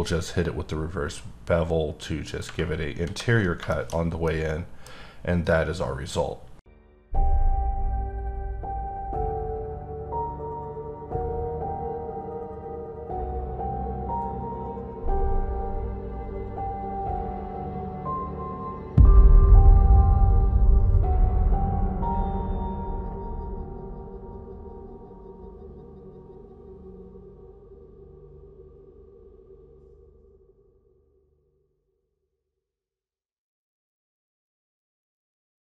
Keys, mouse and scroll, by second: 2.7-3.0 scroll down 2, 3.3 scroll down 3, 3.7 shift+middle click, 4.2 middle click.